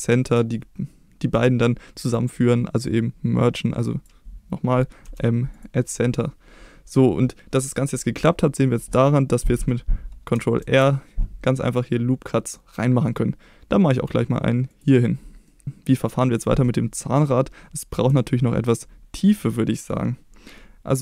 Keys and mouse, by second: 1.7 middle click, 2.9-4.1 drag, 5.1 m, 10.6 ctrl+r, 14.7 click, 15.5 middle click, 18.2 shift+middle click.